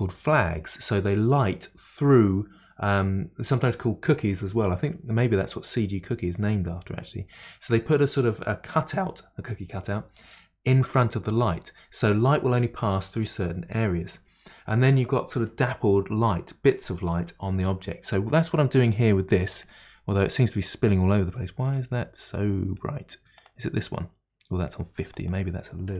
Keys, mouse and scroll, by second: 18.8 click, 19.7-21.5 middle drag, 21.5-22.2 scroll down 6, 22.2-23.4 middle drag, 23.4 click, 25.1-25.9 drag.